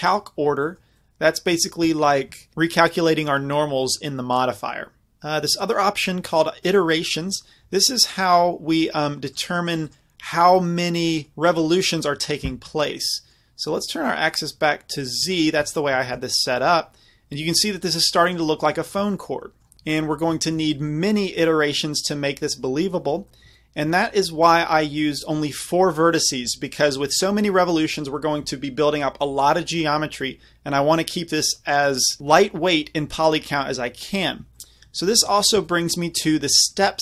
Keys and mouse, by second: 0.4 click, 0.7-5.8 middle drag, 9.3-11.3 middle drag, 13.8-17.9 middle drag, 17.9 click, 18.6 middle click, 18.7 middle click, 18.8 click, 19.3 middle click, 19.7 middle click, 20.2 middle click, 20.9 middle click, 22.2-23.8 middle drag, 24.0 middle click, 24.2 middle click, 26.7 middle drag, 26.9-32.4 middle drag, 34.6 middle drag, 35.0 middle drag, 35.4-37.0 middle drag.